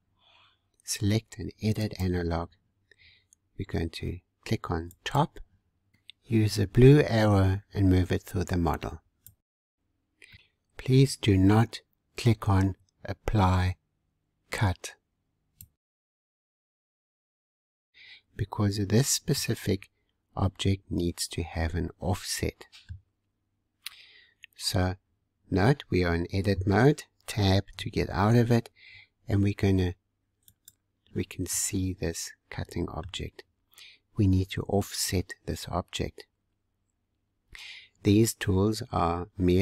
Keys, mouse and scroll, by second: 1.8-6.6 drag, 9.1 scroll down 2, 10.2 middle click, 18.6-19.2 scroll up 1, 19.2-22.3 middle drag, 23.1-25.4 scroll down 1, 27.8 Tab, 30.4-31.5 drag, 31.5-33.6 middle drag, 33.6-34.1 scroll up 2.